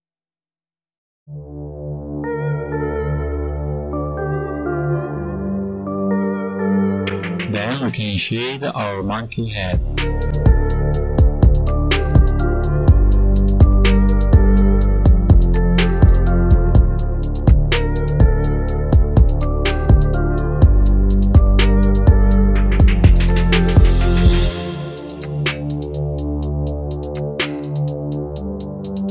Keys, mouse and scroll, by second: 1.4 space, 1.9 click, 2.4 right click, 4.0 click, 4.5 right click, 5.4 click, 5.9 click, 6.7 click, 7.6 click, 7.9 right click, 8.3 click, 9.9 click, 10.4-11.2 scroll down 2, 10.9 click, 11.6-12.4 scroll down 5, 12.7 click, 14.5-15.0 scroll down 8, 15.0 click, 15.8 right click, 16.2 right click, 17.3 click, 19.2 click, 23.1-24.3 scroll up 6, 24.3 click, 26.0 right click, 28.7 click.